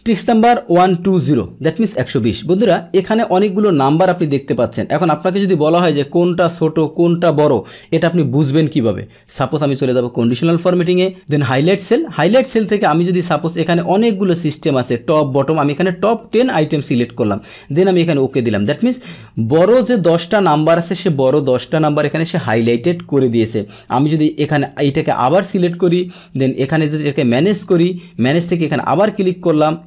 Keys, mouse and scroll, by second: 0.0 Tab, 2.6-5.5 drag, 9.6 click, 11.1 click, 16.3-17.2 drag, 17.9-18.9 drag, 19.6-23.0 middle drag, 25.0 click, 26.0 click, 27.2 click, 28.3 click, 28.6 click.